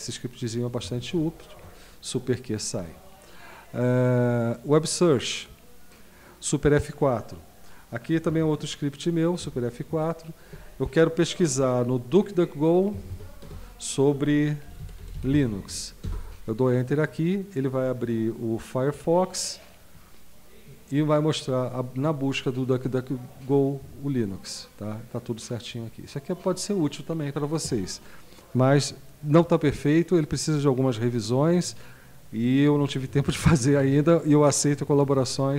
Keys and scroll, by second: 1.2 super+q, 9.5 super+F4, 12.9-15.8 typing, 16.0 Return.